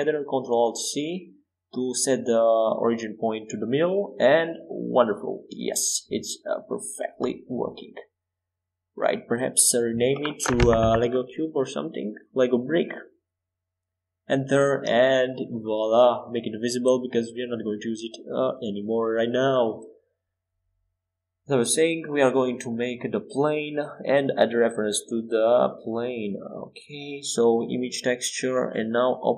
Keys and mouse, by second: 0.1 ctrl+alt+shift+c, 2.5 g, 5.4 g, 8.7-13.7 drag, 16.2-18.0 drag, 16.9-19.0 middle drag, 21.4 shift+a, 23.8-29.2 drag, 29.3 click.